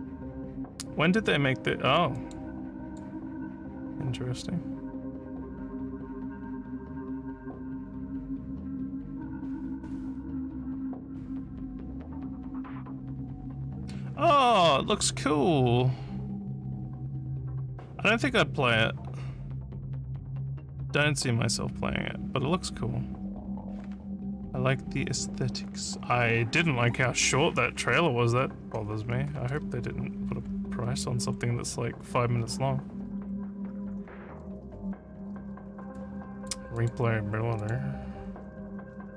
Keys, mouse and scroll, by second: 2.2 click, 2.9 click, 30.3 scroll up 1, 31.1 scroll, 32.4 scroll, 33.2 scroll, 34.6 scroll, 35.9 click, 36.8 click, 37.6 click.